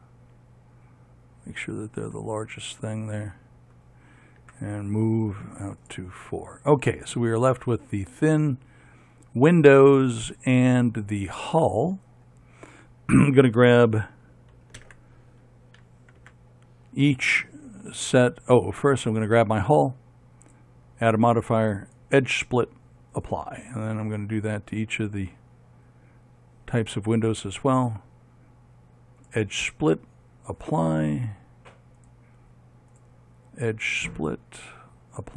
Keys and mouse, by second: 1.5 middle click, 4.6 m, 7.7 middle click, 8.1 middle click, 8.3 middle click, 9.4 middle click, 11.9-15.0 middle drag, 15.0 ctrl+KP_7, 16.4 z, 19.0-20.6 right drag, 21.1-24.7 drag, 24.7 right click, 26.3 middle click, 27.8-29.4 drag, 32.2 right click.